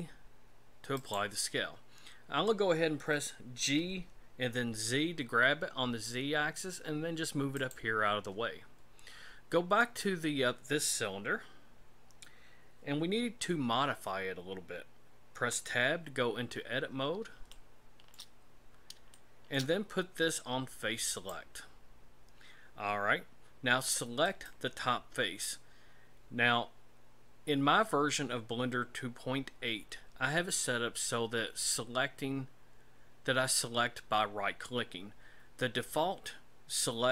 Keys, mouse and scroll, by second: 3.6 g, 9.8 right click, 15.4 Tab, 16.8-17.2 scroll up 5, 17.5 shift+middle click, 18.5-18.9 scroll up 3, 19.1 shift+middle click, 21.1 click, 24.3 right click.